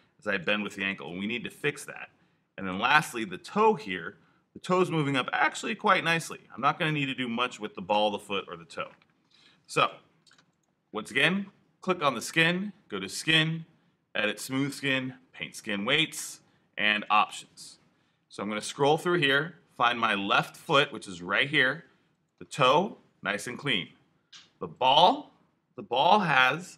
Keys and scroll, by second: 0.8 super+z, 8.1 super+z, 9.1 alt+super+z.